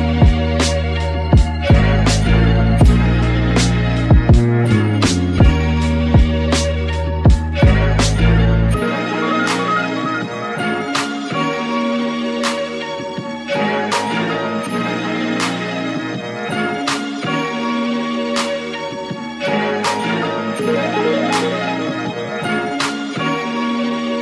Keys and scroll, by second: 16.4 super+z.